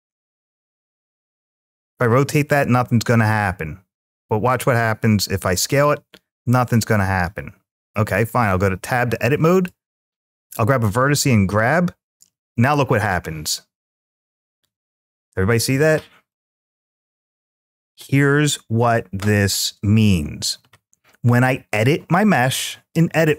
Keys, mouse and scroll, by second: 0.1 r, 1.0 click, 2.5 ctrl+z, 4.5 s, 5.5-7.5 right drag, 8.4 Tab, 9.4 click, 11.1 g, 16.1 click.